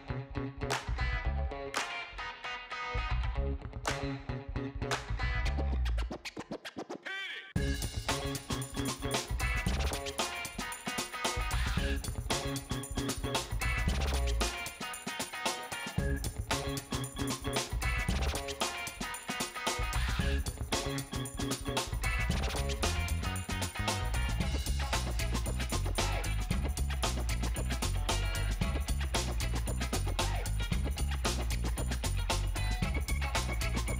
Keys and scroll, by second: 3.2 space, 3.7 space, 22.2 alt+shift+space, 29.5 BackSpace, 31.6 BackSpace.